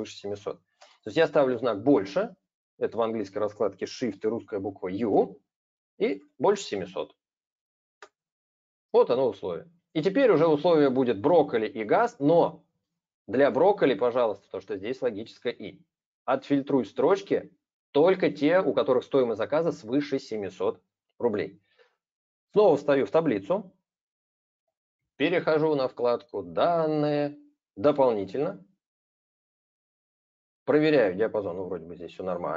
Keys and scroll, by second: 0.7 super+space, 7.7 ctrl+Return.